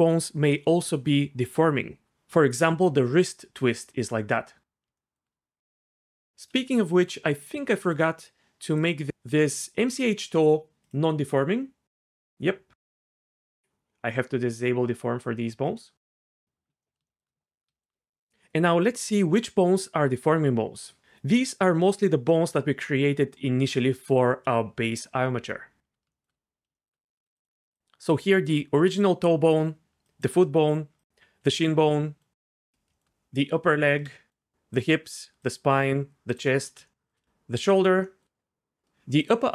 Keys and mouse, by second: 8.8 click, 14.3 click, 14.7 click, 16.3 click, 30.1 shift+click, 34.1 shift+middle click, 34.5 ctrl+shift+z, 34.7 shift+click, 35.4 shift+click.